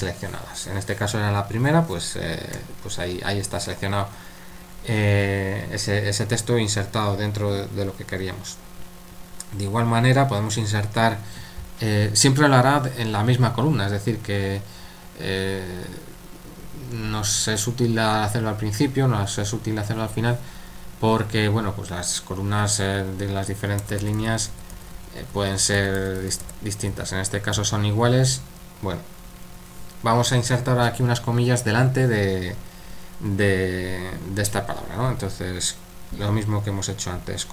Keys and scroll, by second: 23.5-28.8 typing.